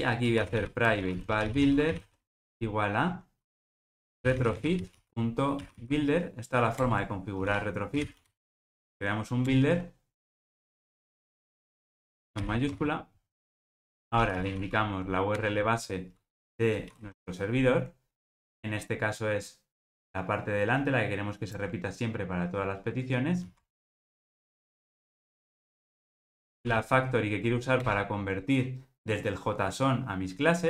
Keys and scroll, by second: 0.9 Return, 6.8 alt+Return, 12.6 Escape, 13.7 alt+super+l, 15.4 Return, 25.0 super+v, 27.9 Return.